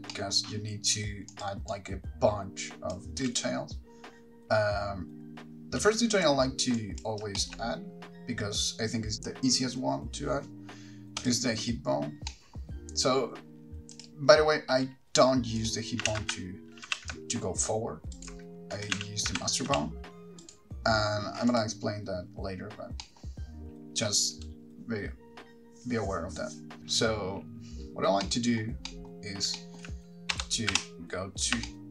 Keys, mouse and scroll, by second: 0.3 middle click, 1.5 click, 1.9 click, 3.5 space, 6.0 space, 6.3 click, 7.0 click, 7.6 shift+middle click, 11.5 click, 14.3 click, 14.3 middle click, 15.9 click, 16.3 g, 18.5 ctrl+right click, 19.1 click, 19.1 g, 20.7 right click, 21.8 click, 28.4 middle click, 29.1 middle click, 29.8 shift+middle click, 30.5 KP_1, 30.9 KP_3, 31.5-31.9 scroll up 3.